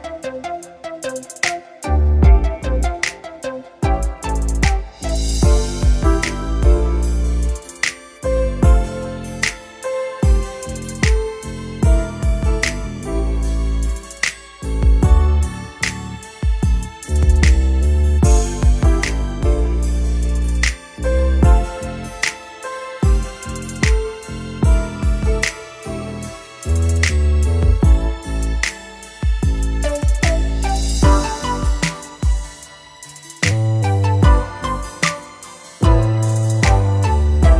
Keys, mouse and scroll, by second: 0.1 s, 3.1 a, 3.6 z, 3.9 Tab, 5.2 Tab, 6.0 shift+a, 8.5 z, 9.8 s, 12.5 z, 13.1 s, 16.7 g, 21.5 shift+d, 25.1 z, 25.5-27.3 middle drag, 25.9 z, 26.2 a, 27.5-31.7 drag, 34.9 Tab, 35.6 Tab, 36.6-37.5 drag.